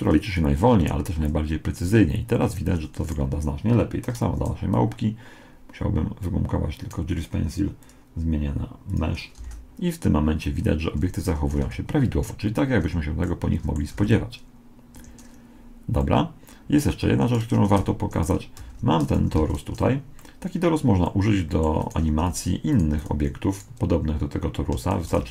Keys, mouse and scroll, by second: 1.2 alt+a, 2.6 Escape, 3.0-6.6 right drag, 4.6 d, 4.8 d, 6.9 d, 7.8-9.6 drag, 7.8 d, 9.6 alt+a, 11.1 Escape, 11.6 alt+a, 12.8 Escape, 13.2-14.4 middle drag, 14.0 alt+a, 15.0 Escape, 17.3 middle click, 17.9 right click, 17.9 g, 18.6 r, 19.4 alt+r, 20.2 middle click, 21.8-25.3 right drag, 22.4 x, 23.0 x, 25.0 shift+d.